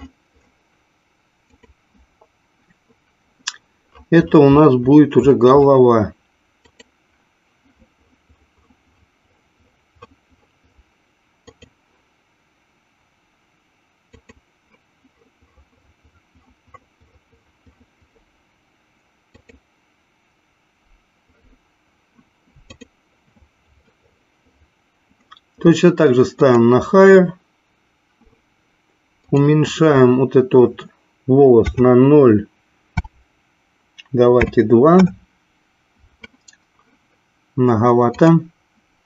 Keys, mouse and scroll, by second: 2.6 click, 6.7-12.7 drag, 14.1-20.5 drag, 23.1 click, 27.6 click, 29.7-36.4 drag, 38.1-39.0 drag.